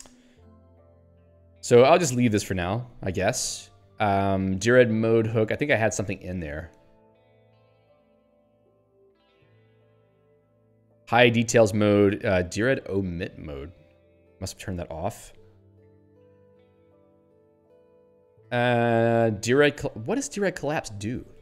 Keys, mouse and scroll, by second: 0.7 ctrl+n, 3.3 ctrl+p, 5.5 ctrl+n, 6.1 ctrl+p, 7.7 ctrl+s, 7.9 ctrl+p, 9.6 ctrl+n, 11.0 ctrl+n, 17.7 ctrl+s, 18.1 ctrl+p.